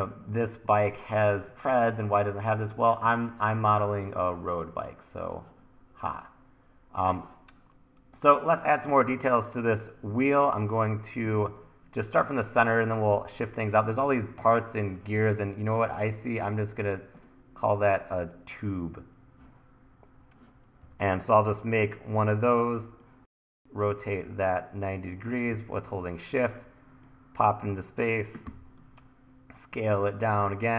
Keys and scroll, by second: 3.1 1, 11.3 1, 15.2 1, 15.7 1, 20.9 e, 23.7 r, 25.5 e, 28.5 t, 30.4 e.